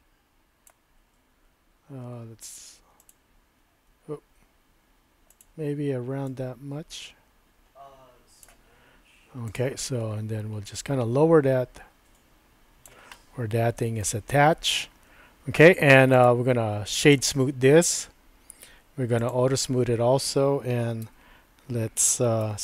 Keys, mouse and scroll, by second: 2.0 s, 3.9 s, 5.3 s, 6.3-8.4 drag, 6.6-7.4 typing, 8.4 typing, 9.4 click, 10.8-12.9 drag, 11.2-11.9 typing, 13.1-14.1 middle drag, 16.3 right click, 19.2 click, 21.0 Tab, 21.1 typing, 22.4 2.